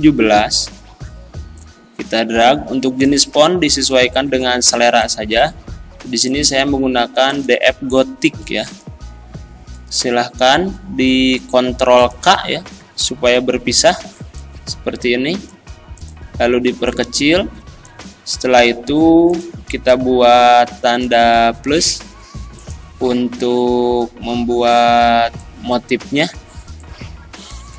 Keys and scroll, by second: 13.3 ctrl+k.